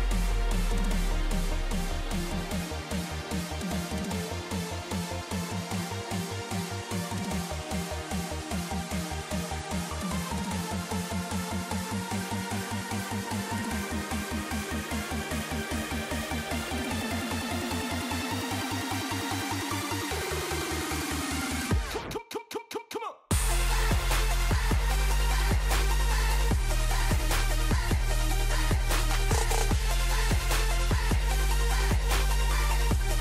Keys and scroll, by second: 1.9 super+c, 3.3 ctrl+c, 5.3 ctrl+c, 5.9 ctrl+c, 6.4 ctrl+c, 8.2 ctrl+c, 8.8 ctrl+c, 10.5 ctrl+c, 13.4 ctrl+c, 19.2 ctrl+c, 20.7 ctrl+c, 21.4 ctrl+c, 23.0 ctrl+c, 24.5 ctrl+c, 25.0 ctrl+c, 31.5 ctrl+c.